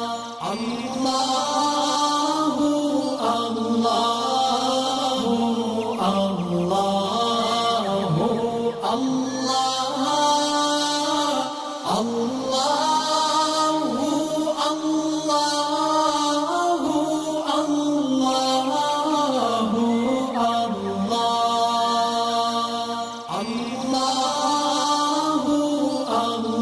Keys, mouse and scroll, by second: 0.4-0.9 alt+scroll down 1, 0.9 click, 1.7-2.4 alt+click, 2.7 right click, 3.7 click, 9.3-9.7 click, 10.4 alt+scroll up 2, 11.6-12.7 drag, 13.3-15.4 alt+scroll up 4, 15.4-16.2 click, 16.4 alt+scroll down 1, 19.2-20.1 click, 21.0-21.8 alt+scroll down 5, 21.8-23.2 drag, 24.4-26.3 drag.